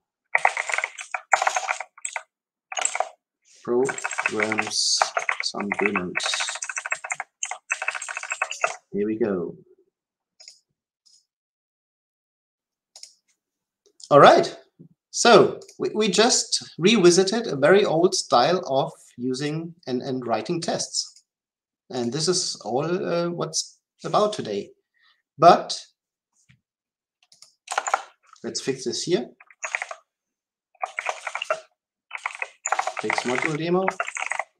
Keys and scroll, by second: 11.6 ctrl+alt+k, 29.7 ctrl+k.